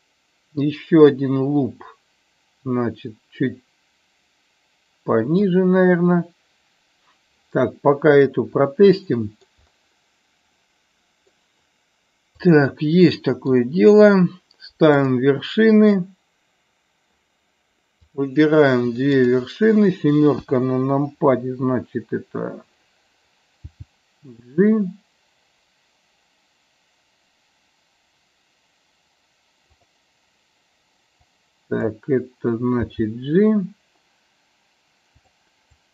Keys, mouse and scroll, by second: 8.2 click, 9.0 shift+middle click, 10.5 middle click, 12.4 click, 13.0 middle click, 15.0 drag, 17.9 click, 20.3 KP_7, 29.7 click, 31.3 click, 35.2 click, 35.7 click.